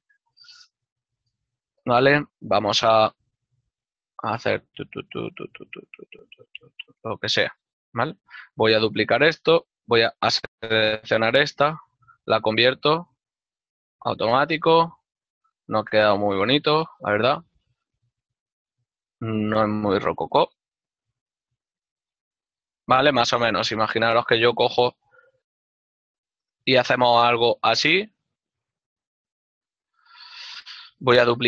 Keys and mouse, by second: 0.0 ctrl+middle click, 8.3 ctrl+click, 8.7 right click, 9.0 l, 11.1 l, 12.2 v, 14.1 click, 15.6 right click, 16.8 g, 19.4 right click, 19.5 g, 20.1 click, 21.4 g, 22.3 right click, 25.7 g, 27.2 right click, 29.1 g, 30.5 click, 30.7 right click.